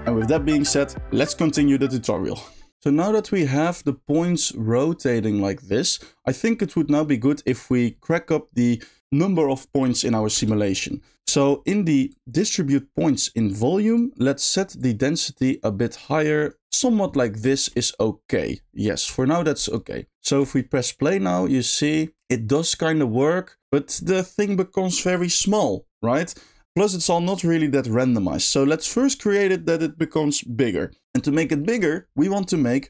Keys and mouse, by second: 2.7 space, 3.0 shift+middle click, 3.6 shift+middle click, 7.0 middle click, 10.3 space, 10.7 middle click, 11.3 middle click, 12.0 click, 13.8 click, 14.7-16.5 drag, 17.5 shift+middle click, 20.4 space, 26.6 space, 28.7 middle click, 31.8 middle click, 32.5 middle click.